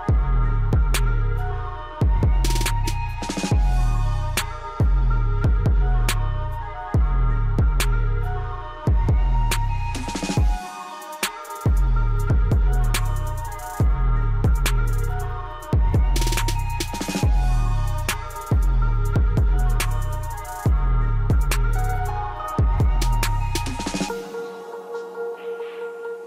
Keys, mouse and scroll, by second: 5.7 scroll up 1, 6.5-14.9 drag, 14.9 w, 15.0 click, 16.2-16.6 scroll up 1, 17.0-25.6 drag, 25.6 shift+w.